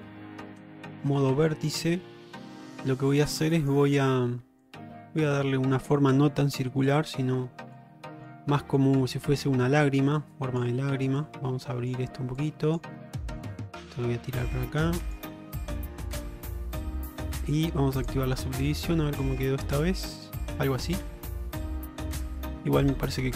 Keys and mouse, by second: 0.7 1, 1.3 alt+z, 2.0 alt+middle click, 2.8 shift+middle click, 3.7 click, 4.7-6.0 drag, 7.9 click, 10.5 click, 11.3 click, 12.5 click, 13.5-15.2 drag, 18.1 click, 18.7 Tab, 19.6 alt+z, 20.4 shift+middle drag, 22.9 Tab.